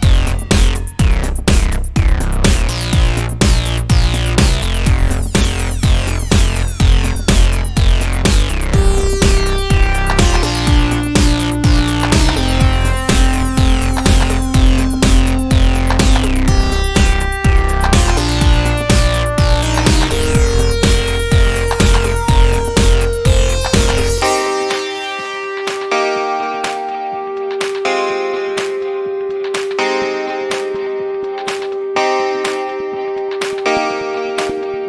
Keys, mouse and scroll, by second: 3.3 right click, 4.9 z, 5.6 z, 7.8 click, 12.3-15.8 middle drag, 18.0-21.0 drag, 20.1-22.1 middle drag, 24.9-26.2 middle drag, 26.2-28.5 right drag, 27.2 click, 29.6-31.9 right drag, 31.1 alt+d, 32.7-33.6 middle drag, 33.6 click.